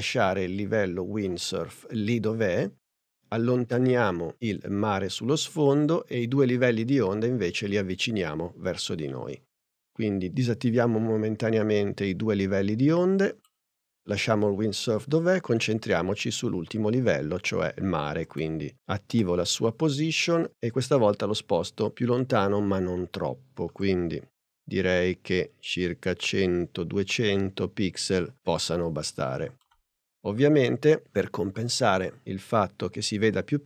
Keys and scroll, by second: 19.2 p.